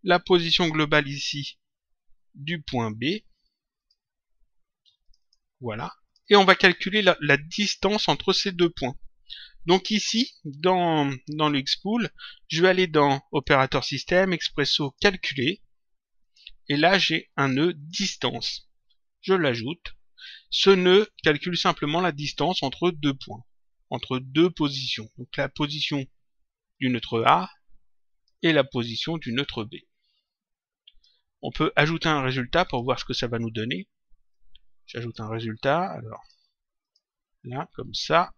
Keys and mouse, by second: 0.8 click, 3.6 click, 5.0 click, 11.2 click, 13.3 click, 16.1 click, 17.8 click, 19.2 click, 21.1 click, 26.6 click, 29.2 click, 32.6 click, 34.2 click, 36.0 click, 38.0 click.